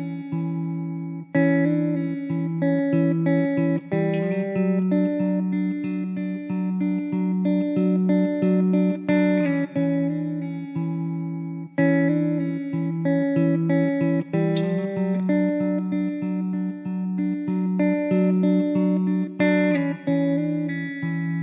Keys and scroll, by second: 0.1 shift+a, 11.5 s, 15.3 Tab, 15.8 alt+z, 16.0 1, 17.2 ctrl+z.